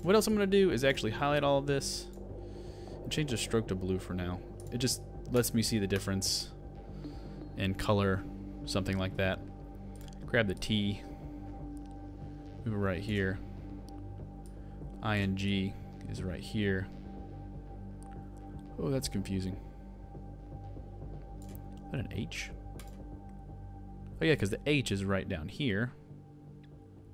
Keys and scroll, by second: 22.1 super+z.